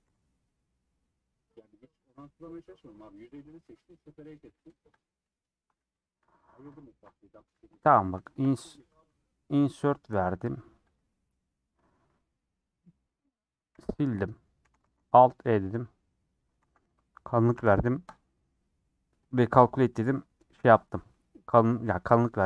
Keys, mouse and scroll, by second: 0.1 g, 2.9 middle click, 3.4 scroll down 1, 3.7 middle click, 4.5 3, 5.0 Left, 5.2-6.7 middle drag, 6.7 ctrl+click, 7.2 middle click, 7.9 scroll up 3, 8.2 shift+middle click, 8.9 typing, 11.1 scroll down 2, 11.5-14.1 middle drag, 14.1 x, 14.3 middle click, 14.6 a, 15.3 alt+e, 16.6 a, 18.1 alt+n, 19.5 Tab, 19.6 scroll down 4, 20.0 Left, 20.2 middle click, 20.3 scroll up 2, 20.9 scroll down 2, 21.1-22.2 middle drag, 22.2 click.